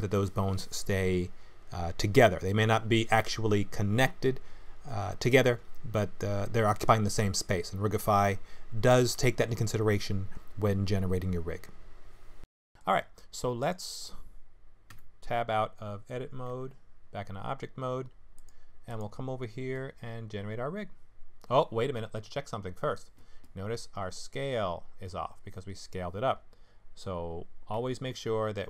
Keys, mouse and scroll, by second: 1.8 middle click, 3.1 middle click, 4.9 KP_3, 5.6 click, 6.5 g, 7.6 middle click, 8.5 middle click, 10.0 click, 10.3 g, 11.5 middle click, 13.6 click, 14.9 Tab, 16.5 ctrl+Tab, 18.3 click, 18.9 click.